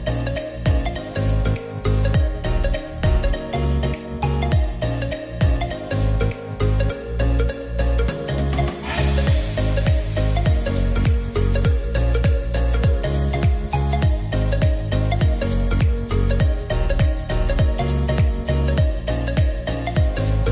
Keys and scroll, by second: 6.8 ctrl+z.